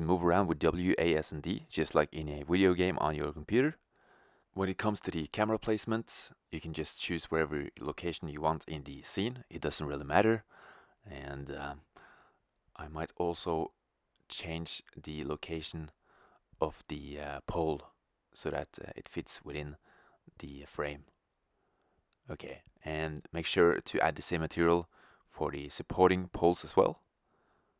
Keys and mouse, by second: 3.2-5.5 drag, 4.0 shift+z, 4.8 shift+z, 5.5 shift+f, 8.5-12.2 drag, 12.2-14.4 middle drag, 12.7 g, 14.9-16.0 drag, 15.2 shift+z, 18.7 shift+z, 19.0 click, 20.6-21.7 right drag, 22.9 click, 24.9-25.2 middle drag, 25.2 middle click, 25.5 KP_0, 26.6 shift+z.